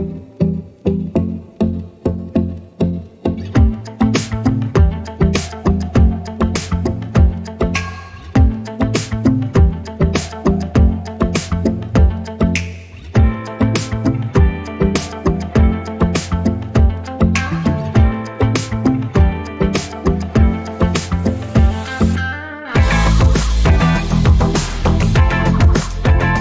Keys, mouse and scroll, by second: 4.3 alt+scroll down 2, 5.2 click, 10.4 scroll down 1, 12.3 click, 13.3-13.7 ctrl+scroll up 1, 13.9-14.2 scroll up 3, 16.1 click, 16.5 scroll down 1, 16.9 scroll up 1, 17.5 click, 18.9 scroll down 1, 20.4 click, 26.1-26.4 scroll down 1.